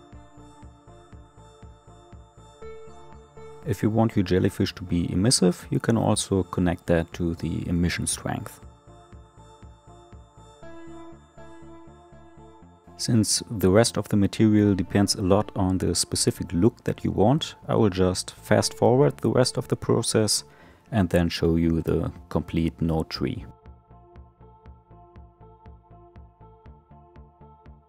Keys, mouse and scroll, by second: 1.0-1.8 scroll up 1, 1.8-3.0 scroll up 1, 3.3-8.7 drag, 9.0-11.0 middle drag, 11.0 click, 14.1 click, 17.3 click, 17.8 shift+d, 18.3 click, 19.5-21.1 shift+middle drag, 21.1-22.3 drag, 22.3 scroll down 1, 22.4-23.9 shift+middle drag, 24.0 ctrl+shift+click, 24.4 shift+a, 25.1 click, 26.1 scroll up 2, 26.2 shift+middle click, 26.3 scroll down 1, 26.4 middle click, 26.4 scroll up 5, 26.5 scroll down 1, 26.6 middle click, 27.0-27.8 drag.